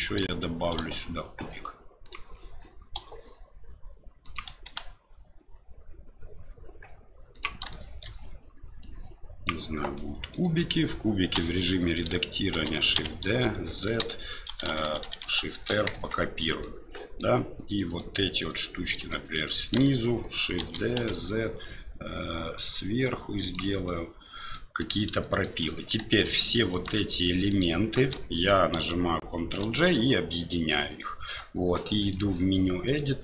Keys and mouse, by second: 0.7 shift+a, 2.9 s, 4.6 s, 7.8 shift+middle click, 8.9 click, 9.9 middle click, 10.4 Tab, 11.3 a, 11.7 middle click, 12.5 shift+d, 14.5-15.2 typing, 15.9 Tab, 16.6 middle click, 17.7 right click, 17.9 middle click, 19.1 shift+middle click, 20.6 shift+d, 23.9-24.5 middle drag, 26.7 shift+right click, 27.5 shift+right click, 29.6 ctrl+j, 32.0-33.0 drag.